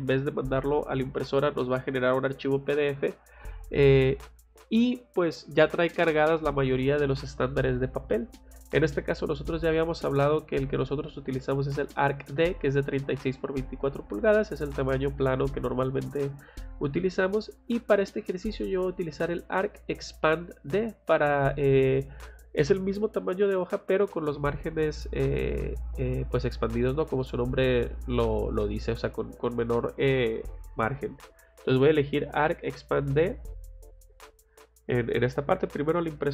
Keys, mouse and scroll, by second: 8.4 click, 33.1 click.